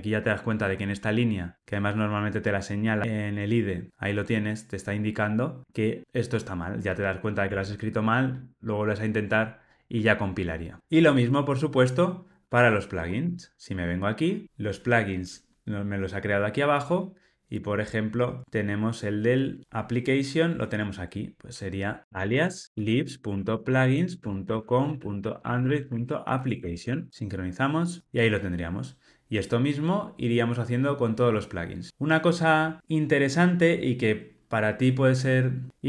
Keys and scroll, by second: 22.0 alt+shift+Left.